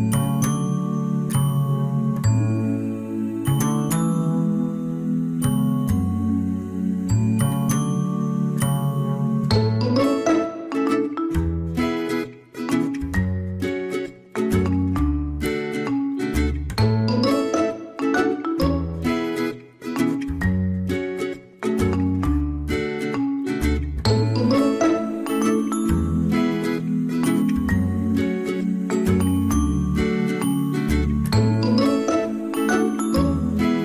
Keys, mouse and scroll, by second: 0.6 right click, 3.1 space, 4.3 right click, 16.0 ctrl+-, 21.8 right click, 24.4 ctrl+-, 27.2 ctrl+z, 27.6 ctrl++, 27.7 space, 29.3 ctrl++, 29.4 ctrl+-, 31.3 ctrl+z, 31.5 ctrl+z.